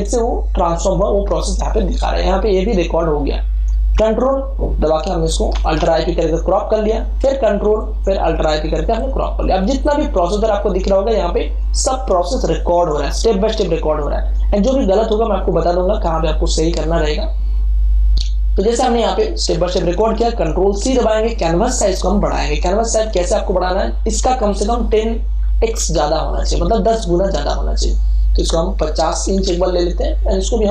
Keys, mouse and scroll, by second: 4.1 ctrl+click, 5.4 alt+i, 5.7 alt+p, 7.7 ctrl+click, 8.6 alt+i, 8.8 alt+p, 20.2 ctrl+alt+c, 28.3 click, 29.2 5.